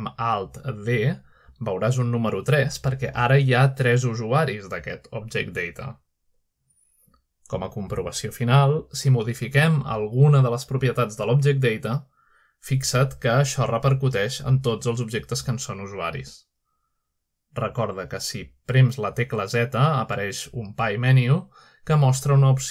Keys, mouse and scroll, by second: 2.1 scroll down 1, 2.9-5.7 middle drag, 5.7 click, 9.3 shift+middle click, 9.9-10.6 shift+middle drag, 11.2 click, 13.5-16.4 drag, 17.4 click, 18.6 click, 21.9 z.